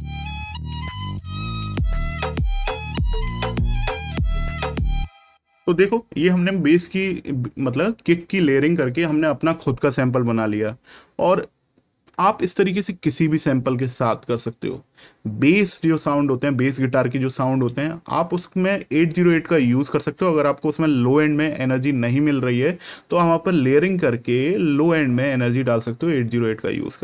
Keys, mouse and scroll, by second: 4.6 click.